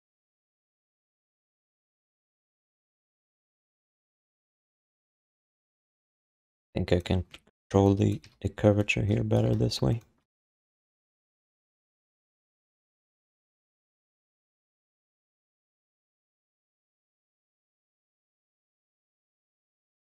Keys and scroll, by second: 0.3 BackSpace, 1.3 alt+shift+d, 1.5 3, 4.8 1, 7.5 4, 8.2 w, 9.5 d, 10.4 5, 11.6 3, 14.1 ctrl+z, 14.3 1, 15.1 q.